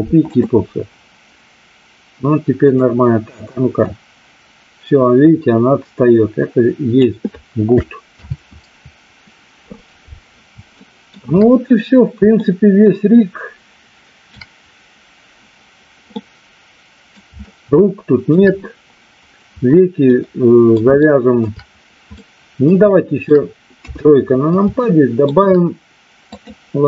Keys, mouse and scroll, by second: 2.7 click, 3.9-6.9 drag, 8.1 ctrl+z, 10.7 shift+middle click, 12.5-14.3 shift+middle drag, 16.2 middle click, 17.5 shift+middle click, 20.1 middle click, 20.9 shift+middle click, 22.2 middle click, 22.9 shift+middle click, 23.7 KP_3, 24.8 shift+middle click, 26.2 click.